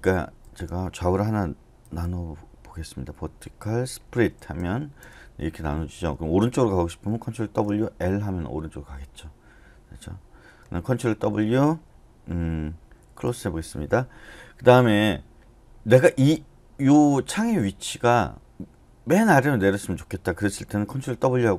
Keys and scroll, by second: 1.8 v, 3.9-5.0 typing, 7.4 ctrl+w, 7.9 typing, 11.1 ctrl+w, 13.3 c, 21.2 ctrl+w.